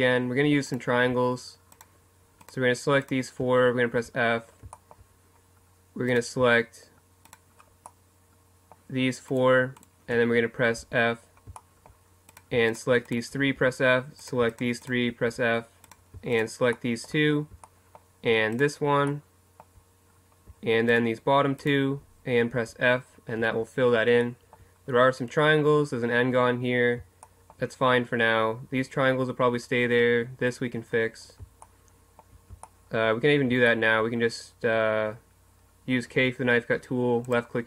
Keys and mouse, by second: 4.0 f, 10.8 shift+f, 11.2 right click, 13.6 f, 15.3 f, 16.0 right click, 19.3 middle click, 20.9-22.6 middle drag, 22.6 f, 23.4 a, 26.9 middle click, 31.1 middle click, 36.1 k.